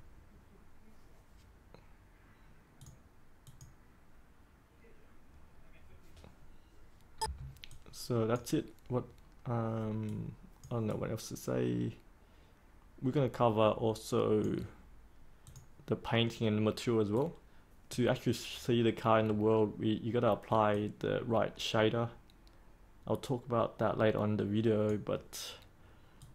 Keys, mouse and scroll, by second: 7.1 3, 7.3 click, 7.6-18.2 drag, 18.7-19.2 scroll down 1, 19.2-20.5 scroll up 1, 20.7-26.3 drag.